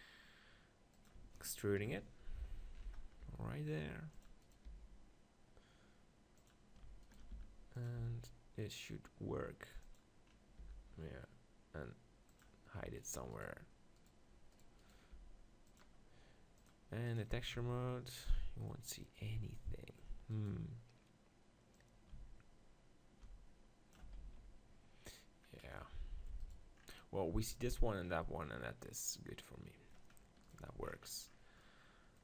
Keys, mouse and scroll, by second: 3.2 g, 4.2-6.1 drag, 4.6-6.3 right drag, 4.8 g, 6.5-8.5 drag, 7.0-8.8 right drag, 7.3 e, 8.1 g, 9.9-11.8 drag, 10.8 e, 11.8 middle click, 12.4-14.3 drag, 13.0-14.3 middle drag, 13.0-16.6 right drag, 15.1 g, 15.8 click, 17.1-18.4 drag, 17.6 Tab, 18.4-20.3 middle drag, 20.3-22.2 right drag, 21.8-23.6 drag, 24.2 ctrl+z, 25.5 middle click, 26.4-28.1 right drag, 28.1-29.7 middle drag, 30.5-32.2 right drag.